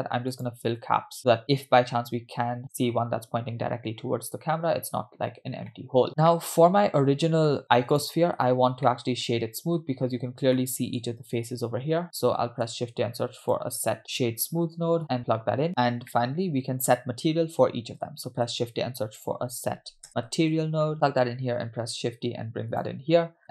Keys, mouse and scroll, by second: 0.5 click, 5.7 middle click, 6.1 click, 6.1 scroll down 2, 6.3-7.6 middle drag, 7.9 click, 8.8 middle click, 9.8-10.2 scroll up 5, 10.6-11.0 shift+middle drag, 11.8-12.4 scroll down 2, 12.7 shift+a, 16.1 middle click, 17.6-18.0 scroll up 2, 18.5 shift+a, 21.9 shift+d.